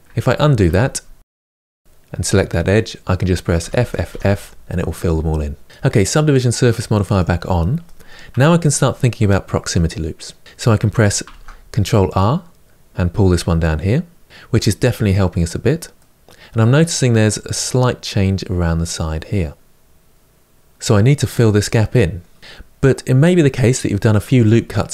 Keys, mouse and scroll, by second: 0.0 ctrl+z, 0.2 ctrl+z, 0.6 ctrl+z, 1.0 ctrl+z, 1.4 ctrl+z, 3.4 f, 3.6 f, 3.9 f, 6.9 click, 7.6-11.0 middle drag, 11.0 ctrl+r, 15.7-19.1 middle drag, 20.5-24.9 middle drag.